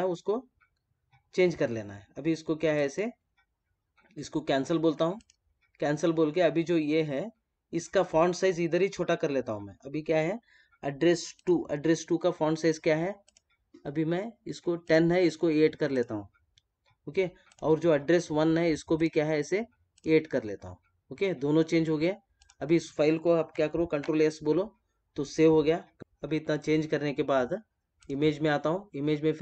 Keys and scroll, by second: 23.8 ctrl+s, 27.9 space.